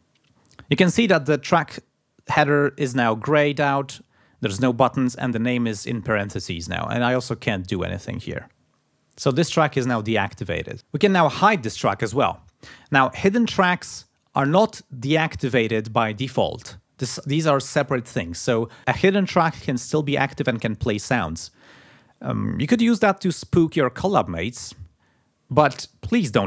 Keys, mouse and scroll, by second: 6.8 click, 7.7 click.